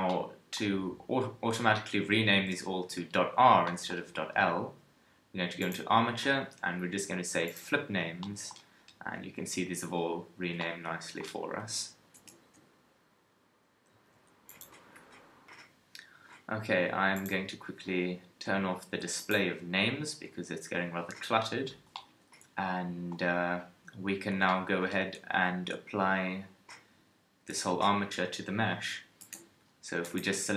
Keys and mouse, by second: 11.6 KP_1, 12.1 Tab, 14.0 s, 29.2 ctrl+Tab.